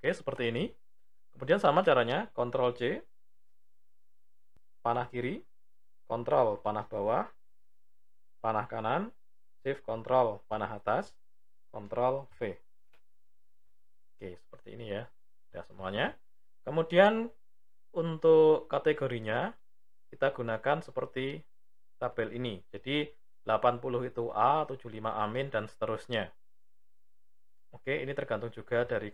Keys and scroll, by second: 2.2 ctrl+c, 4.5 Left, 6.0 ctrl+Down, 8.2 Right, 9.5 ctrl+shift+Up, 11.6 ctrl+v.